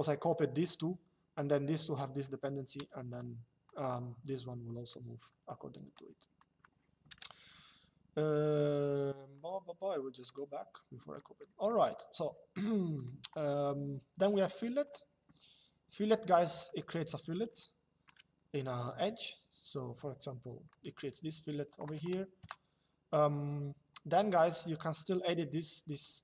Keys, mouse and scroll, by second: 2.5 q, 4.7 Escape, 5.7 click, 6.8 Delete, 8.2 click, 10.0 click, 12.7 click, 14.5 click, 16.3 click, 17.3 shift+middle click, 18.3 click, 22.1 KP_Enter, 25.6 click.